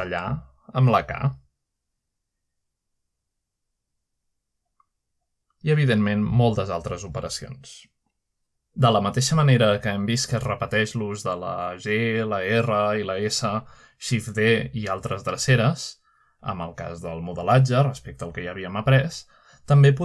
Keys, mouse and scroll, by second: 0.0 typing, 0.9 click, 1.2 click, 1.2-2.5 typing, 1.4 click, 2.0 middle click, 2.7-5.0 drag, 3.9 typing, 4.9 typing, 6.3 click, 7.1 click, 8.2 click, 9.5 click, 10.2 Return, 10.6 middle click, 11.5 typing, 11.6 shift+middle click, 12.8 middle click, 13.4-14.2 typing, 14.2 shift+middle click, 14.6 shift+middle click, 15.0 shift+middle click, 15.5 typing, 16.8 click, 17.0 right click, 17.6 click, 18.6 click, 19.4-20.0 typing, 19.9 middle click.